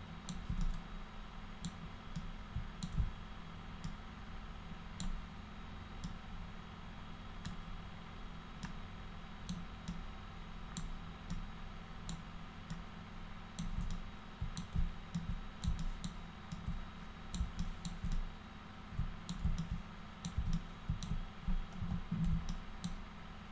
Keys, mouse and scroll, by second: 0.6-1.6 drag, 2.1 click, 3.8-5.0 alt+drag, 6.0-7.4 alt+drag, 8.6 alt+click, 9.9 alt+click, 11.3 alt+click, 12.7 alt+click, 13.9 click, 15.1 alt+click, 15.8 alt+click, 16.5 alt+click, 17.6 alt+click, 18.1-19.2 drag, 19.6 alt+click, 20.5 click, 21.8 f, 22.5 alt+click.